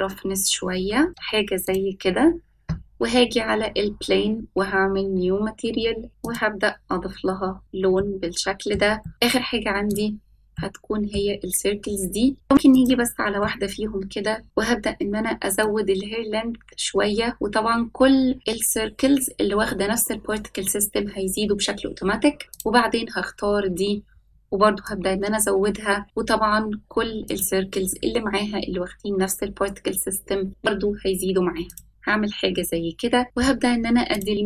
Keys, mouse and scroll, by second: 0.6-4.3 drag, 7.6 click, 9.1 scroll up 3, 9.5-10.0 shift+middle drag, 11.4-12.0 middle drag, 12.7 click, 13.3-13.9 middle drag, 14.2 s, 14.8-16.1 middle drag, 16.4-16.9 scroll up 1, 16.9-17.3 shift+middle drag, 17.6 scroll down 1, 18.4-22.2 drag, 22.6 click, 24.9-27.9 drag, 31.9 click, 32.5-33.2 middle drag, 33.2 click, 34.0 click.